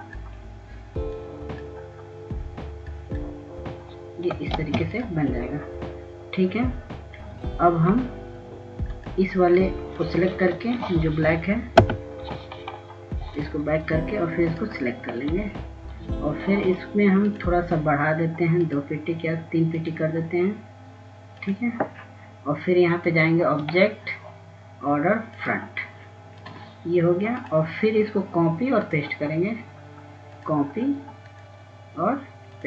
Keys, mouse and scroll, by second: 3.5-6.3 drag, 6.8 ctrl+space, 7.2 click, 9.1-10.3 scroll up 1, 11.2 click, 12.8 ctrl+z, 14.1 shift+Page_Down, 15.6 click, 17.8-18.5 scroll down 1, 19.6 click.